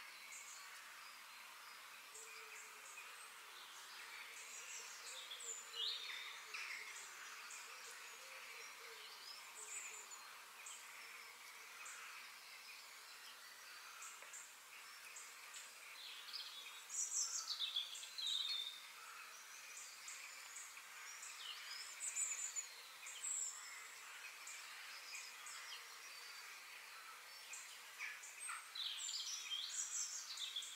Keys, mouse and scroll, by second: 0.4-1.3 scroll up 2, 1.9-3.9 shift+middle drag, 8.3 g, 18.9 g, 22.1 middle click, 22.7 scroll down 1, 22.9-23.9 middle drag, 23.9-24.5 scroll up 3, 24.5 scroll down 1, 24.7-26.6 middle drag, 30.5 f.